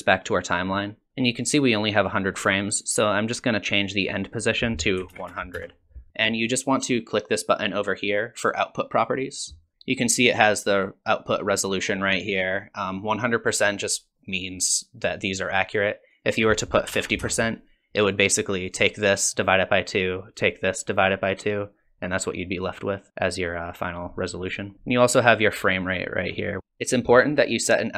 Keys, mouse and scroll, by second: 1.6 click, 4.4 click, 5.3 KP_0, 8.9 click, 16.1 click, 24.4 click.